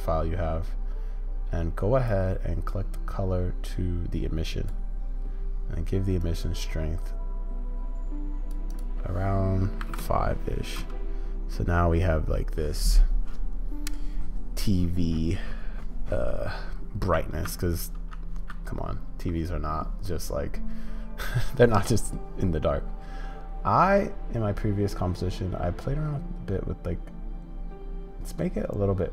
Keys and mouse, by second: 10.8 space, 18.1 z.